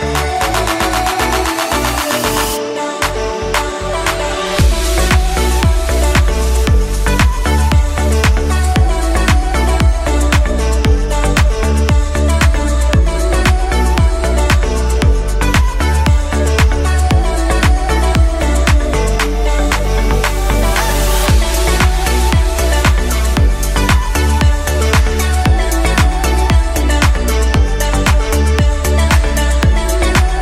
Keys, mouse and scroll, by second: 0.7 shift+a, 4.8 Tab, 5.2-6.0 scroll up 2, 6.0-7.5 shift+middle drag, 7.5 click, 8.7 e, 12.8 click, 15.8 e, 19.1 click, 23.7 click, 24.7 alt+click, 25.8 f, 26.3 middle click, 27.2 Tab, 27.7 middle click, 28.1-28.9 scroll up 2, 30.3-30.4 drag.